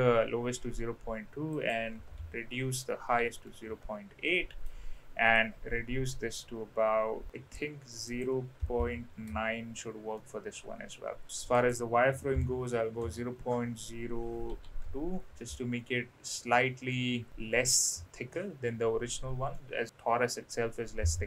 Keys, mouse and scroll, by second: 1.5-4.0 drag, 4.3 middle click, 5.4-7.6 drag, 8.0-9.6 drag, 10.1-11.2 middle drag, 11.6-15.2 drag, 15.5-16.3 middle drag, 16.9-17.6 middle drag, 19.6-19.9 middle drag.